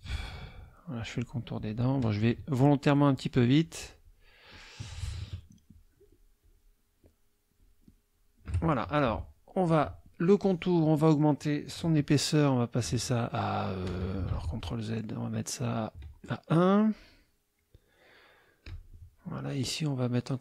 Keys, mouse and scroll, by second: 1.0 shift+click, 1.5 shift+click, 2.9-4.3 shift+drag, 6.0 shift+click, 6.4 shift+click, 7.6 shift+click, 9.1 F2, 9.7 click, 12.8 right click, 14.3 ctrl+z, 14.9 ctrl+click, 15.0 right click, 16.5-17.8 right drag, 18.6 click.